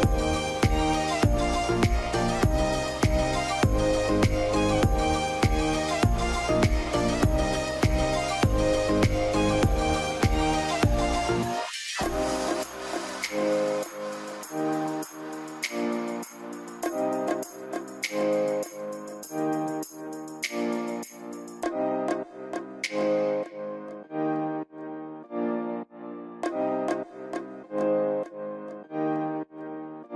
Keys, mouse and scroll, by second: 0.6-2.1 scroll down 1, 9.6 scroll down 1, 11.5 right click, 21.2 middle click, 21.3-21.7 scroll down 1, 21.7 scroll up 1, 22.0 middle click, 22.6 alt+q, 23.7 F3, 24.9 alt+middle click, 26.4 right click, 27.8 ctrl+u, 28.5-29.5 scroll up 1.